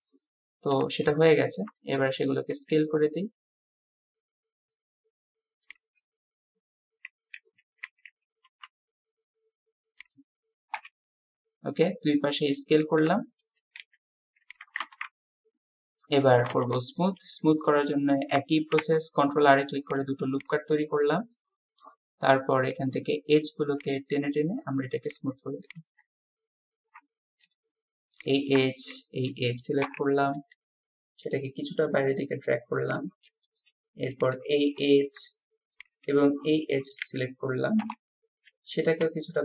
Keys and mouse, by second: 1.1 shift+middle click, 6.0-7.4 drag, 10.8 KP_3, 13.2 shift+click, 13.5-15.0 shift+middle drag, 13.8 s, 16.7 s, 16.9 middle click, 18.8 ctrl+r, 20.9 click, 25.1 click, 25.7 shift+click, 27.0 shift+click, 29.9 KP_3, 31.3-32.0 typing, 33.2 click, 34.2 click, 34.8 click, 37.1 w, 37.8 KP_3, 39.0 g.